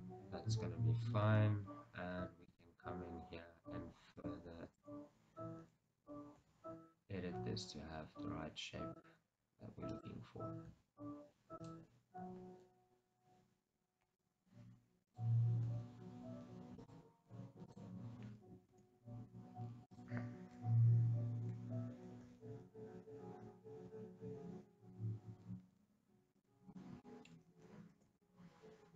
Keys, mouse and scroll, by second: 0.0 Tab, 1.1 scroll up 2, 1.4 Tab, 2.6 shift+z, 4.3 click, 4.9-6.5 middle drag, 4.9 shift+z, 6.5 g, 9.1 click, 10.0 click, 10.7 g, 11.8 click, 15.8 g, 16.9 click, 17.8 click, 18.8 shift+z, 20.0-22.4 drag, 22.4 g, 26.5 click, 27.2-28.9 shift+middle drag.